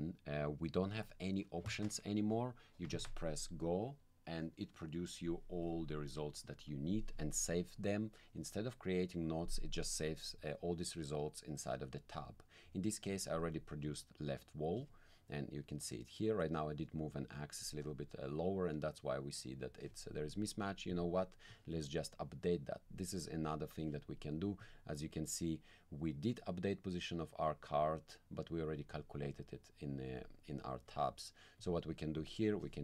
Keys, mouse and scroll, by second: 13.9 click, 20.9 click, 24.6 click, 30.2 click, 30.9 click, 31.6 click, 32.1 click.